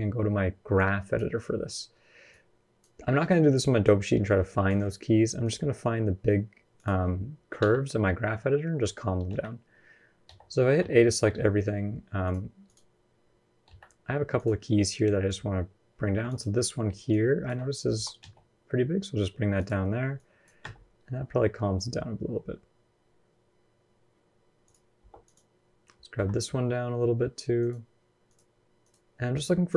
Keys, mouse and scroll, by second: 0.6 click, 17.8-18.1 scroll up 2, 17.8 g.